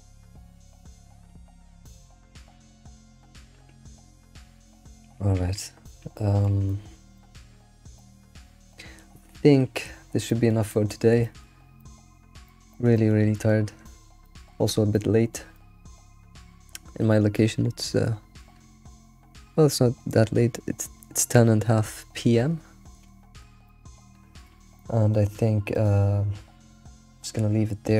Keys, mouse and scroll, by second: 4.0 scroll down 2, 12.9 alt+middle drag, 13.3-13.7 shift+middle drag, 13.7-14.0 scroll down 4, 14.2-27.9 shift+middle drag, 24.2 scroll down 3.